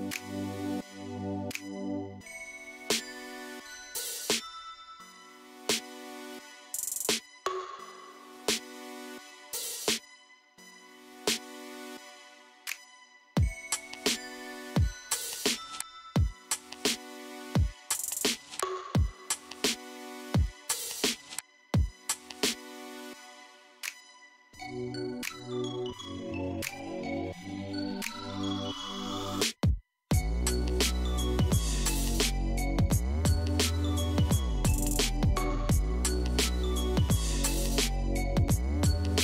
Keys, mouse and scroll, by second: 0.8-3.3 scroll up 3, 4.1 shift+z, 6.0 click, 6.9 shift+z, 8.2 s, 11.8 click, 12.6-13.9 scroll down 1, 15.0-15.5 scroll down 1, 15.5-18.5 middle drag, 20.0 click, 20.8-21.3 scroll down 2, 21.3 scroll up 5, 21.9-28.1 middle drag, 28.3-29.1 shift+middle drag, 29.1 KP_1, 29.8 scroll up 1, 30.3-31.2 shift+middle drag, 31.2 scroll up 2, 32.0-35.8 shift+middle drag, 38.7 click.